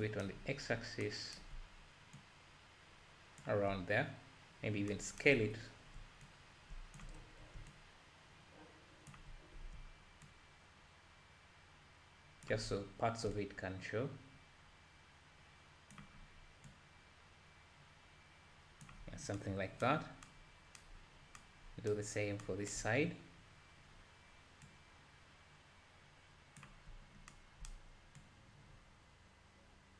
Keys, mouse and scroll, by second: 2.2-29.9 shift+drag.